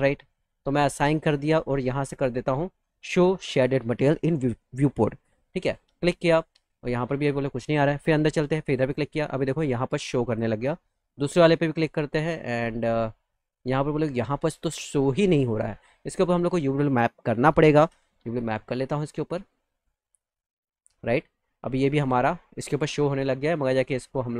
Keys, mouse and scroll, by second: 0.7 click, 5.4 click, 7.4 click, 8.6 click, 9.2 click, 10.1 click, 11.3 click, 13.2-14.4 middle drag, 15.0 click, 15.4 click, 16.3 click, 18.9 click, 20.2 click, 20.9 click, 21.3 alt+middle click, 22.4 click, 23.7 click, 24.1 click.